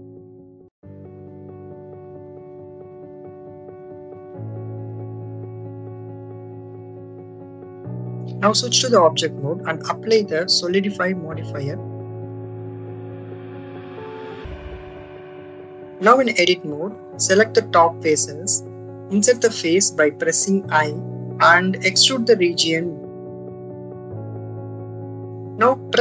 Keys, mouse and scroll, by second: 1.2 click, 2.4-5.9 drag, 6.3 click, 7.6 click, 9.2 Tab, 10.7 click, 12.1 click, 13.1 click, 14.4 click, 15.9 Tab, 16.9 click, 20.1 click, 25.3 click.